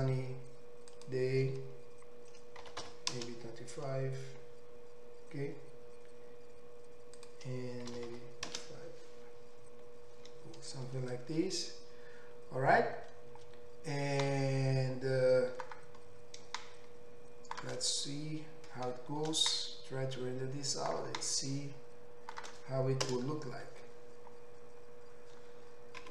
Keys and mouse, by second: 15.1-15.7 middle drag, 15.7-17.1 drag, 17.1 shift+middle click, 17.8 click, 17.9 middle click, 18.1 click, 18.3 middle drag, 18.4 drag, 18.5-18.9 middle drag, 18.9-20.2 drag, 20.2 middle click, 20.6-26.1 drag, 23.1 KP_0.